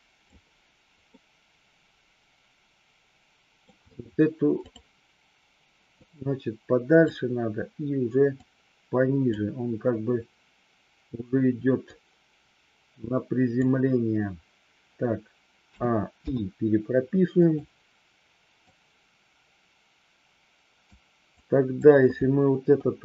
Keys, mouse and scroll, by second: 1.2-3.7 middle drag, 4.7 click, 6.0-7.0 drag, 8.4 click, 11.9-13.7 drag, 15.7 a, 16.3 i, 17.4 click, 18.7-20.9 drag, 21.3-22.0 drag, 22.7 Delete.